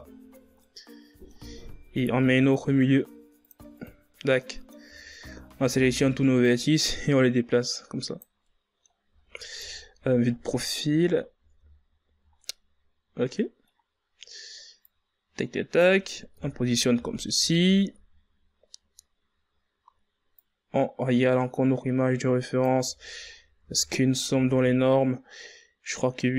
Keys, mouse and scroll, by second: 0.3 scroll down 5, 0.5-2.1 middle drag, 2.1 ctrl+r, 4.1 scroll down 1, 4.3 middle click, 4.8 a, 5.5 a, 6.4-8.4 drag, 8.4-9.5 middle drag, 9.5 KP_3, 10.2-11.7 ctrl+scroll up 14, 11.7 shift+scroll down 1, 12.3-13.9 middle drag, 13.9 scroll up 3, 14.7-16.3 drag, 16.3 KP_1, 16.8 z, 17.8-18.2 shift+scroll up 5, 20.3-22.8 drag, 22.8 z, 23.5 Tab, 24.0 scroll down 5, 24.2 a, 24.7 scroll down 5, 25.3-26.2 middle drag, 26.2-26.3 scroll up 8.